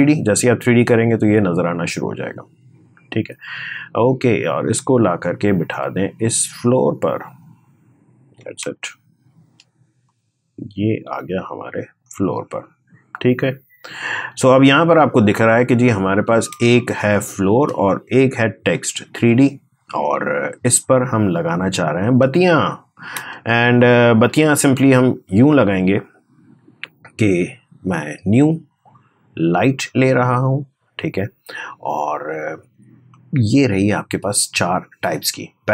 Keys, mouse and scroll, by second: 0.2 click, 2.9-7.6 drag, 7.6-8.4 scroll up 1, 8.4 space, 8.6 click, 8.9 space, 9.9-15.1 drag, 15.1-15.5 scroll down 1, 16.4 space, 16.5 click, 16.8 space, 18.5 click, 21.9 space, 22.4-23.0 scroll down 1, 23.0 space, 23.6 click, 24.3-25.7 scroll down 1, 25.7-27.2 drag, 27.2 right click, 28.2-32.9 drag.